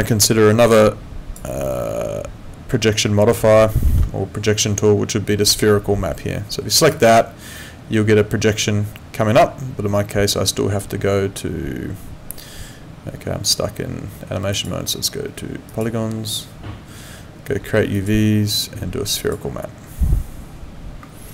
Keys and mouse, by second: 3.8 ctrl+4.